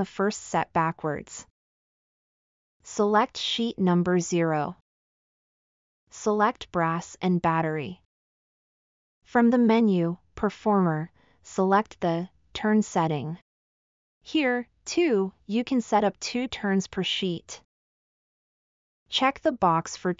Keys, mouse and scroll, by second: 4.6 scroll up 2, 4.7 middle click.